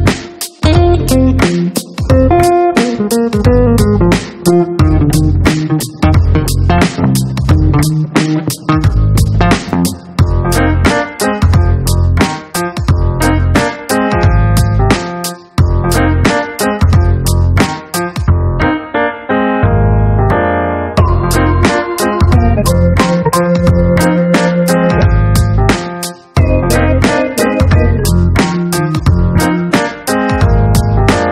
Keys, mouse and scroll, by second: 1.5 click, 2.8 click, 4.1 click, 5.6 click, 6.0 right click, 7.0 click, 9.0 click, 20.8 click, 22.9 click, 24.1 click, 26.0 click, 28.7 click.